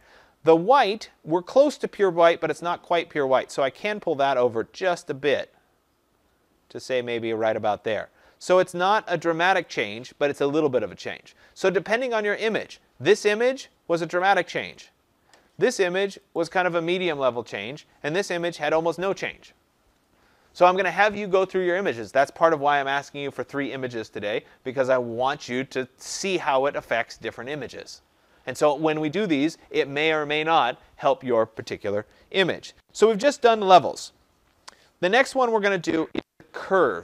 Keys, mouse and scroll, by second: 0.0 click, 7.3 click, 8.9 click, 9.6 click, 12.5 click, 14.3 click, 14.8 click, 16.3 click, 18.4 click.